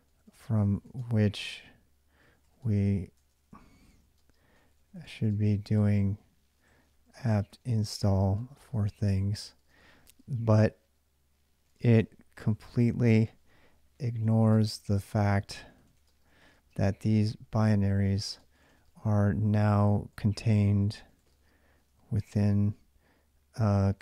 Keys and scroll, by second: 0.0-9.8 typing, 11.2-24.0 typing.